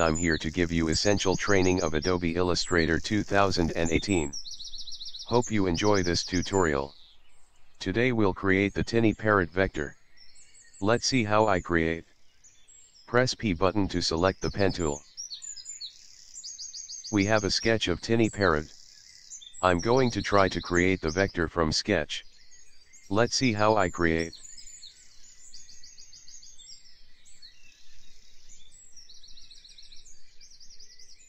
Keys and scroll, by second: 3.4 alt+shift+z, 6.4 ctrl+0.